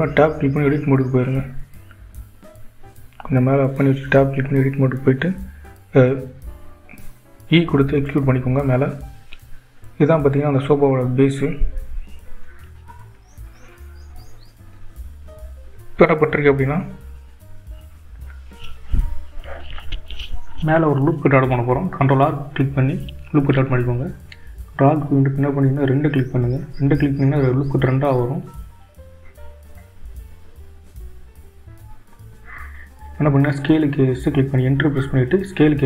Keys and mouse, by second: 1.7 g, 7.8 Tab, 8.8 e, 22.9 ctrl+r.